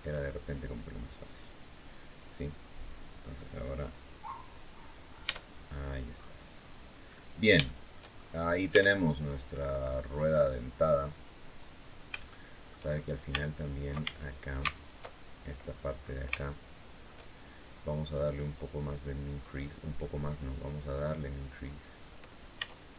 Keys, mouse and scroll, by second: 3.9-4.6 scroll down 1, 5.0 Tab, 5.5-5.8 scroll down 1, 6.2-6.6 scroll down 2, 6.8 scroll up 2, 7.4 shift+click, 8.2 scroll up 2, 8.4 Tab, 9.0-9.5 scroll down 2, 10.3 scroll up 2, 11.5 scroll up 2, 12.0 shift+middle click, 13.4 alt+shift+right click, 13.7 alt+shift+a, 14.4 alt+shift+right click, 15.3-16.0 scroll down 4, 16.1 shift+click, 17.8-18.5 scroll up 2, 19.1-22.0 drag, 22.3 Tab.